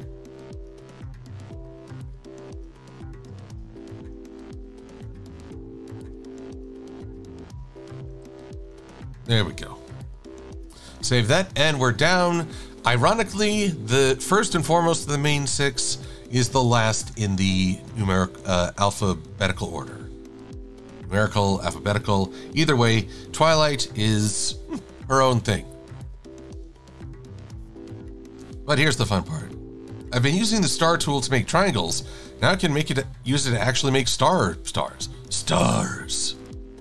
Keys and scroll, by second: 3.4 shift+super+a, 3.9 v, 9.9 super+-, 10.4 super+s.